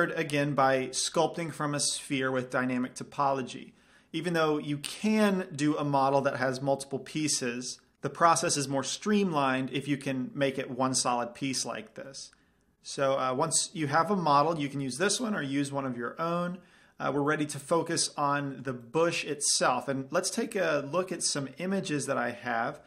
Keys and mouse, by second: 2.0 click, 13.6-22.1 middle drag, 22.1 click.